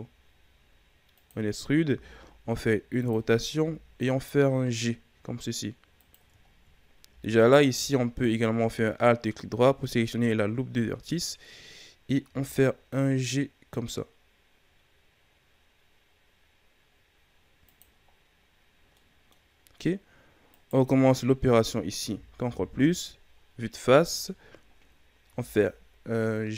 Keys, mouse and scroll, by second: 1.9 r, 3.5 g, 6.5-7.4 ctrl+scroll up 2, 7.4 alt+right click, 12.2 g, 18.1-18.9 scroll down 2, 18.9 middle click, 19.5-20.5 scroll up 2, 20.5 right click, 22.0 ctrl+KP_Add, 22.7 KP_1, 24.4 ctrl+scroll down 1, 24.7-25.2 scroll up 2, 25.2 g.